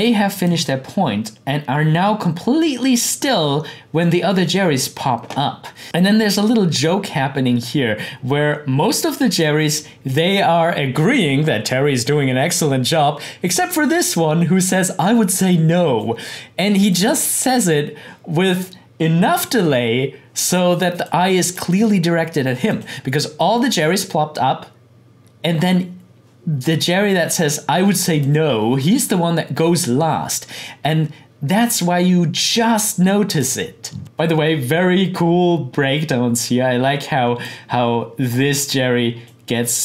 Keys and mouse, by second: 0.3 click, 5.8 click, 9.2 click, 15.5-16.9 drag, 21.0-22.6 drag, 22.8 click, 26.9-28.2 drag, 32.5-39.8 drag.